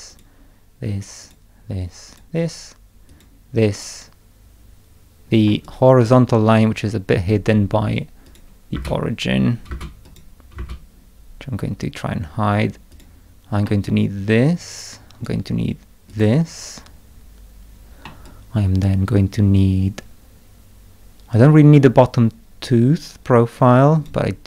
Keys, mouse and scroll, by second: 0.1 click, 1.2 click, 2.1 click, 3.1 click, 5.5 middle click, 5.6 click, 6.0-6.6 scroll up 1, 6.6-7.7 scroll up 1, 7.7-8.7 scroll up 1, 8.2 click, 8.7 space, 9.7 space, 10.0 click, 10.5 space, 12.9 click, 13.6-15.2 middle drag, 13.8-15.2 drag, 16.1 click, 18.0-24.0 middle drag, 18.2-24.0 drag.